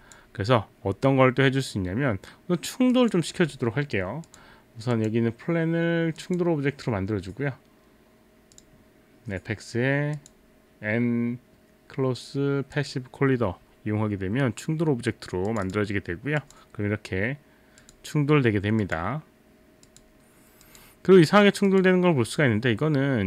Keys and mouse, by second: 0.0 click, 3.0 click, 4.3 click, 4.9 click, 6.2 click, 8.5 click, 10.2 click, 12.8 click, 15.5 click, 16.4 click, 17.8 click, 18.8 click, 19.9 click, 20.7 click, 21.7 click.